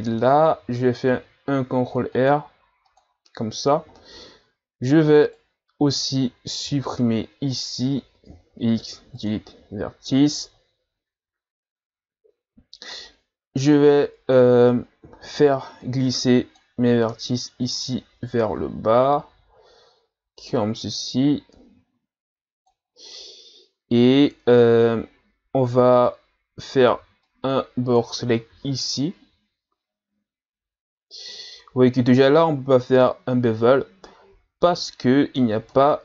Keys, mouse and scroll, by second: 3.9-5.1 scroll down 2, 5.3 right click, 6.6 b, 8.3 x, 15.4 b, 17.7-20.7 drag, 24.3-25.1 scroll up 1, 26.0 right click, 26.9 b, 28.6 z, 29.0-36.0 middle drag.